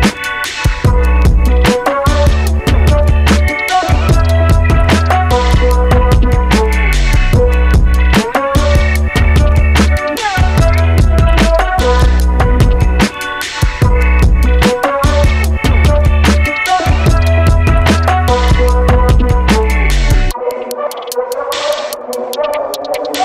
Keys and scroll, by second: 0.0-0.5 typing, 4.6-5.3 typing, 5.8 Return, 9.9-10.6 typing.